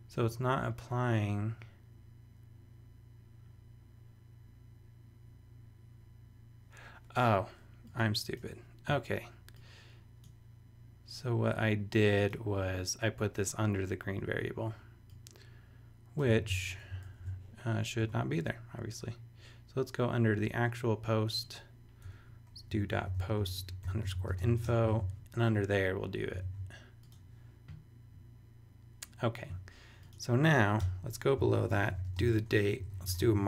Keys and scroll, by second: 16.4 super+c, 16.7 super+BackSpace, 18.3 BackSpace, 22.0 Return, 22.4-25.0 typing, 26.4 super+s, 30.8 Return, 31.4-33.4 typing.